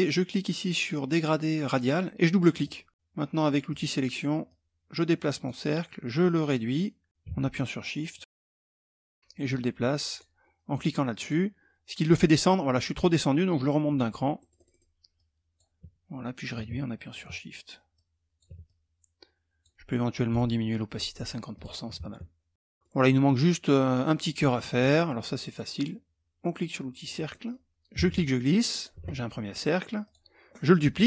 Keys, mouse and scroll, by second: 2.1 click, 3.2 click, 4.0-5.4 drag, 5.8-8.3 drag, 8.4 click, 9.7-10.7 drag, 10.7 click, 13.4 click, 13.9 middle click, 14.7 click, 16.1-17.2 shift+drag, 17.5 shift+click, 18.2-19.4 shift+drag, 19.9 right click, 21.1 click, 21.6-22.3 ctrl+scroll down 2, 22.5 middle click, 22.5 scroll, 23.8-25.1 middle drag, 23.8 scroll, 26.6 click, 26.9 middle click, 27.5-28.5 ctrl+drag, 29.6 click, 30.8 ctrl+d.